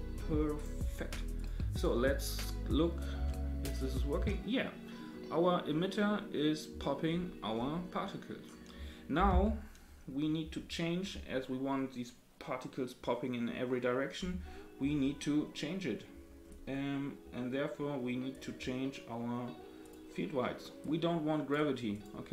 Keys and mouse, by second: 0.5 click, 3.1 space, 9.3 space, 18.3 click, 19.8 click, 20.8 click.